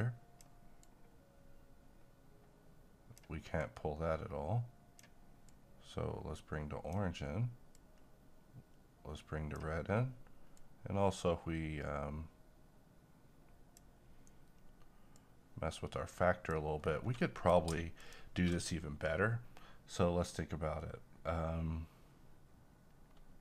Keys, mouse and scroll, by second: 16.8 scroll down 1, 17.2 middle click, 18.0 ctrl+click.